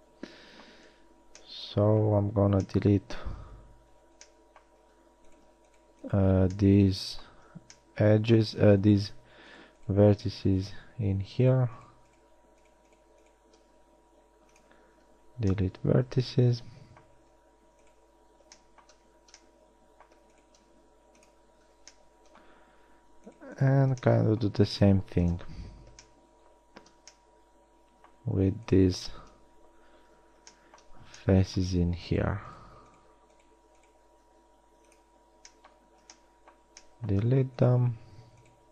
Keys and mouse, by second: 1.4 a, 6.8 middle click, 7.6 z, 13.8 x, 15.2 z, 17.4 z, 18.8 middle click, 19.7 middle click, 19.8-21.8 typing, 23.5-25.5 middle drag, 25.5 KP_3, 30.3 f, 34.6 x, 38.0 click.